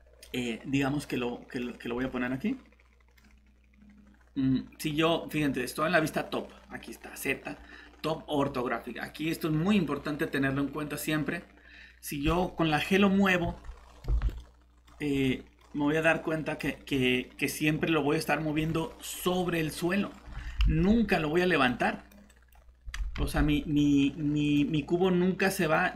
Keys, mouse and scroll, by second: 0.2 middle click, 13.4 g, 14.0 Escape, 16.1 click, 18.6 g, 20.3 Escape, 20.6 alt+Tab, 23.2 ctrl+z.